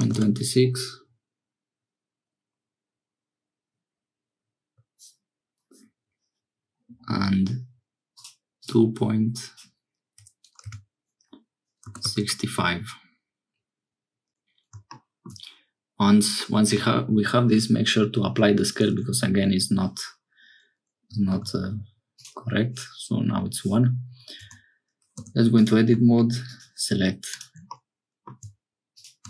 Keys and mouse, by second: 8.1-14.3 drag, 21.3 ctrl+a, 25.1 Tab, 25.1 2, 25.6 click, 27.7 middle click.